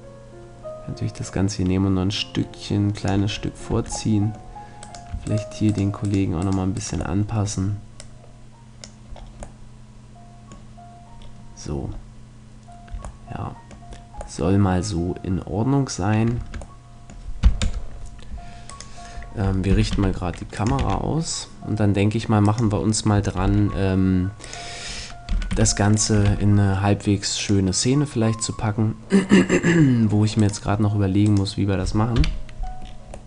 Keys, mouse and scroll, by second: 3.7 Tab, 4.1 middle click, 4.9-7.3 right drag, 8.7-9.8 drag, 12.9 a, 16.4 Tab, 16.9-18.7 middle drag, 17.6 KP_0, 18.7-19.9 right drag, 19.7 g, 20.7-22.4 drag, 20.8 shift+f, 22.6-24.4 drag, 23.5 shift+f, 24.5-29.4 drag, 25.3 g, 26.3 shift+f, 30.5-32.9 right drag, 32.2 KP_7, 32.9 middle click.